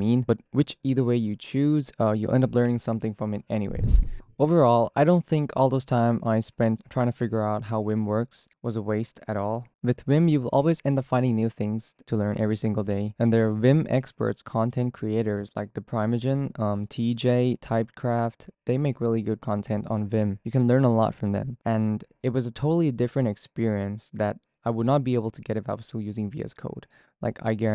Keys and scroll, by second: 0.5 k, 13.8 f, 25.9 p, 26.1 ctrl+c.